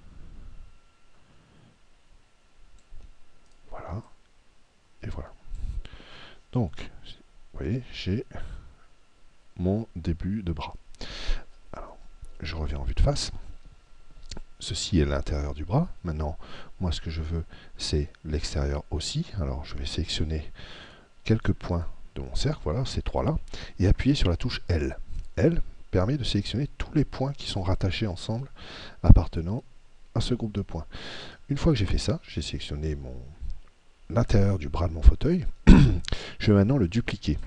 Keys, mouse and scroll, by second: 3.5 right click, 4.0 click, 6.8-8.7 middle drag, 12.8 KP_1, 20.8 right click, 25.2 l.